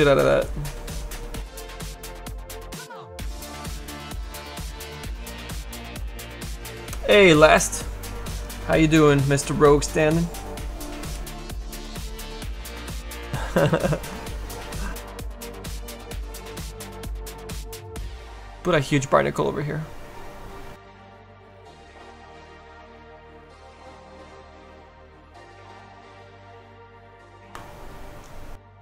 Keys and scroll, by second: 16.8 s, 18.0 s, 18.3 s, 20.7 s, 23.8 s, 25.0 s, 26.7 s.